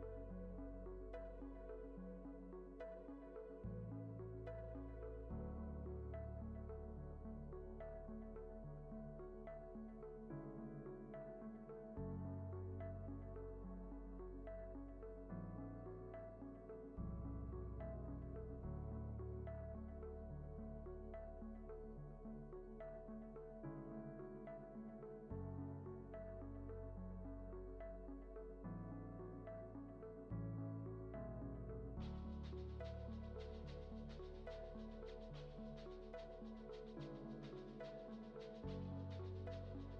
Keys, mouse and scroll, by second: 2.0-2.4 middle drag, 2.8 shift+a, 9.4 ctrl+c, 9.9 ctrl+v, 11.7-12.5 drag, 13.5 click, 13.6 middle click, 15.1-17.3 drag, 17.8-18.9 drag, 19.5-20.6 drag, 21.9-23.2 drag, 24.6-26.1 drag, 28.4-29.7 drag, 30.9-32.3 drag, 33.7-34.9 middle drag, 37.6 shift+a.